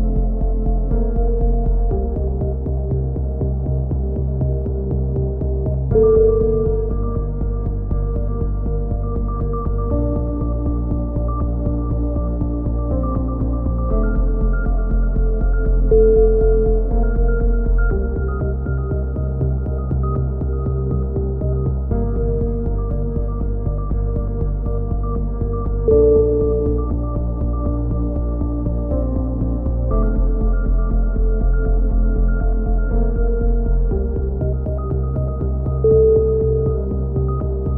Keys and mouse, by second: 1.7 a, 1.9-2.9 middle drag, 3.2-4.4 right drag, 4.4 click, 4.9 middle click, 5.2 x, 6.3 z, 6.3 middle click, 6.7 Tab, 7.1 Tab, 7.4 z, 11.4 k, 15.1 a, 15.7 z, 15.9 click, 16.7 middle click, 17.2 middle click, 17.4 z, 17.7 z, 17.9 z, 19.6 right click, 20.0 click, 21.3 a, 21.6 click, 22.5 click, 23.0 click, 23.7 right click, 24.9 middle click, 24.9 right click, 25.1 click, 25.3 a, 25.4 z, 25.8 z, 27.7-28.9 middle drag, 28.9 click, 29.1-30.9 middle drag, 31.2-32.6 drag, 33.2 c, 34.0 right click, 34.9 click, 36.3 c, 37.1 right click.